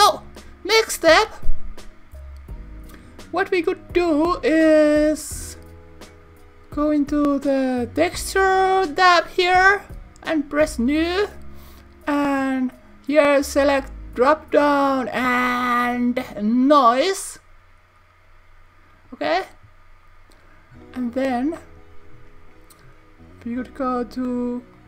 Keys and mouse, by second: 9.1 click, 10.9 click, 12.2-17.3 drag.